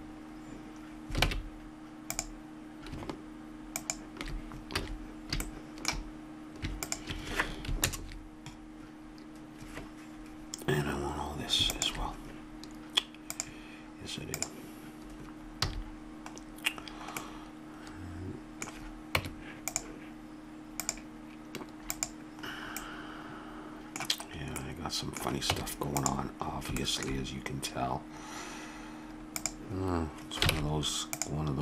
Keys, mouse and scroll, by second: 1.2 ctrl+Tab, 3.7 click, 4.8 a, 7.9 ctrl+KP_Add, 11.7-16.3 drag, 15.6 a, 19.2 Tab, 20.8-22.9 drag, 23.0-24.6 middle drag, 25.5 Tab, 29.0 Tab, 30.5 ctrl+Tab.